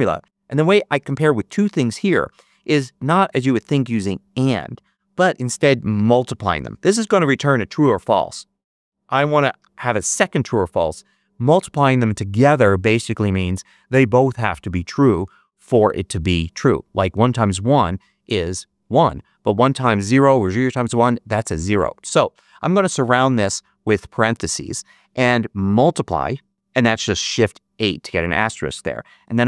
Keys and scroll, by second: 23.2 shift+9, 24.5 shift+0, 25.7 shift+8, 29.1 shift+9.